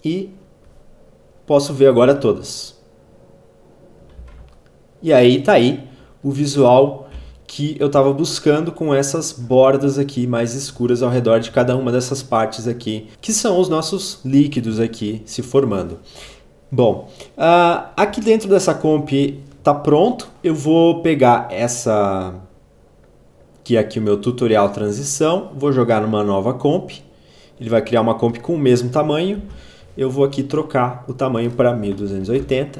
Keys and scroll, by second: 3.4 z, 6.3 v, 18.1 ctrl+a, 29.2 ctrl+k, 31.1-32.7 typing.